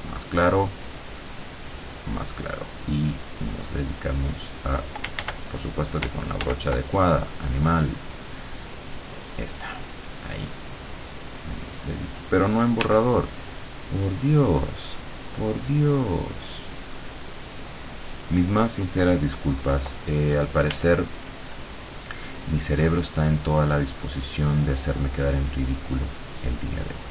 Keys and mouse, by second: 0.9 click, 2.1 click, 3.0-4.7 drag, 5.3 ctrl+z, 6.5 ctrl+z, 8.1 click, 9.3 click, 10.3-12.1 drag, 12.9 e, 13.7-18.1 drag, 20.7 r, 22.8 click, 23.4 click, 25.8 click, 26.8 click.